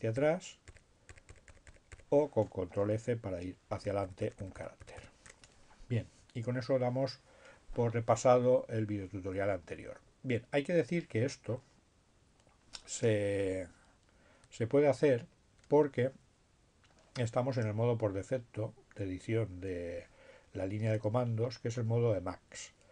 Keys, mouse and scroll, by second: 0.7 b, 3.7 f, 8.5 Down, 12.7 BackSpace, 20.8-21.8 typing.